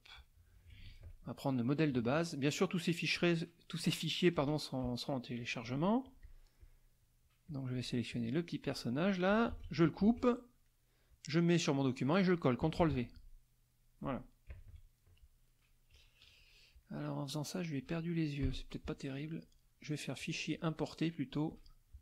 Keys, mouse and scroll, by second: 0.7 KP_Subtract, 1.7 middle click, 3.2 click, 4.3 KP_Add, 5.1 middle click, 6.0 click, 6.6 click, 7.5 click, 8.1 click, 9.5 ctrl+x, 10.0 ctrl+alt+x, 10.2 alt+Tab, 10.7 click, 11.7 click, 12.8 ctrl+v, 14.5 KP_Subtract, 15.9 KP_Subtract, 16.8 click, 18.4 Delete, 20.2 click, 21.5 click.